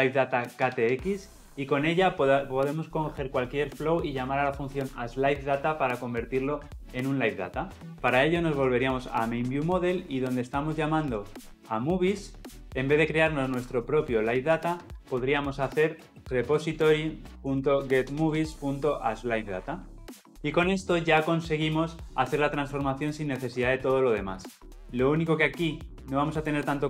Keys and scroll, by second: 17.1 Return.